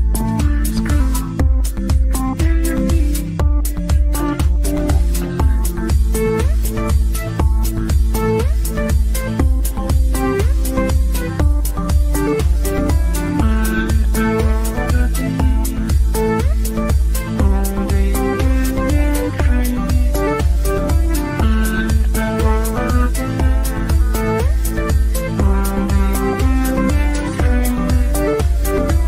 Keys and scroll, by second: 21.6 g.